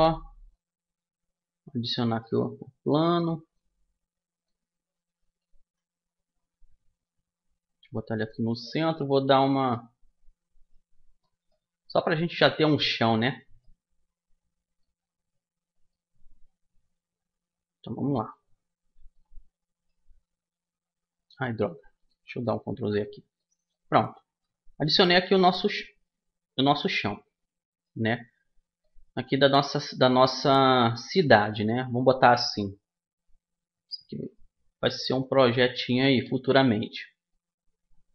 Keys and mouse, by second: 0.2-2.0 drag, 2.0-3.2 middle drag, 3.2-5.1 drag, 5.2 KP_1, 6.7-8.5 drag, 8.5 s, 10.4 click, 11.3-15.3 middle drag, 15.5-17.7 middle drag, 18.8-20.9 middle drag, 19.9 s, 22.3 ctrl+z, 23.1-25.3 middle drag, 24.7 s, 26.7 middle click, 30.5 middle click, 31.4-33.1 right drag, 32.1-33.9 drag, 33.9 right click, 34.9-36.6 drag, 36.6-38.1 middle drag.